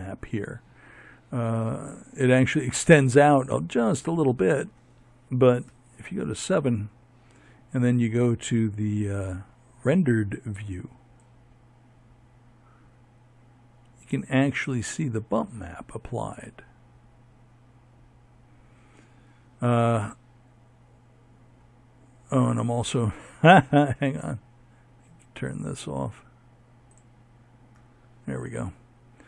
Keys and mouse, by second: 3.4 KP_7, 8.0 click.